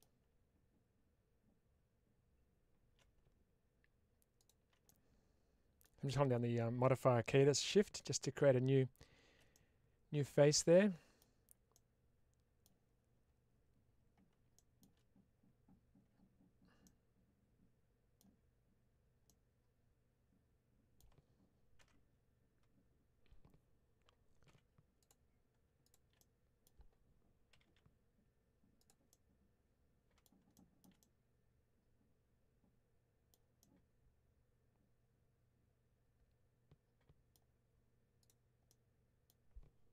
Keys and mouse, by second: 4.7-5.7 middle drag, 9.4-11.1 middle drag, 11.6-12.5 middle drag, 16.7-18.1 middle drag, 19.1-20.8 middle drag, 24.9 click, 26.1 middle click, 28.7 click, 29.0-30.1 middle drag, 30.5 shift+middle click, 30.9-33.2 middle drag, 33.5-37.2 middle drag, 38.1 click, 38.5 middle click.